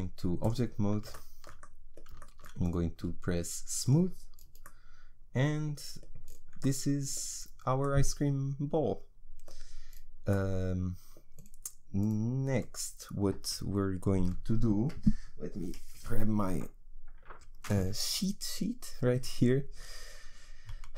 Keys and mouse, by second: 0.7 Tab, 3.8 click, 4.7-5.9 middle drag.